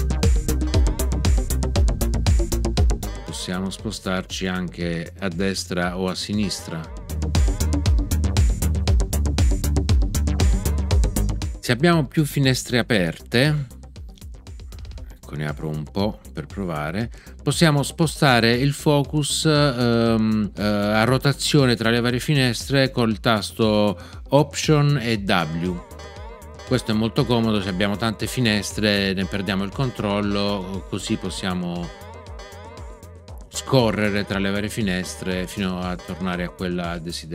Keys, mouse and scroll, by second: 0.6 Up, 3.0 Down, 6.4 Right, 7.3 Down, 10.4 Left, 25.4 alt+w.